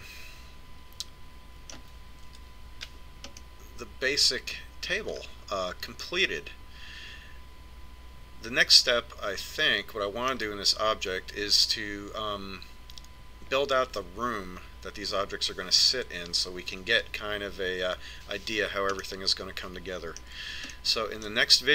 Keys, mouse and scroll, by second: 3.6 Tab, 4.8 middle click, 7.4-9.2 middle drag, 20.5-21.7 middle drag.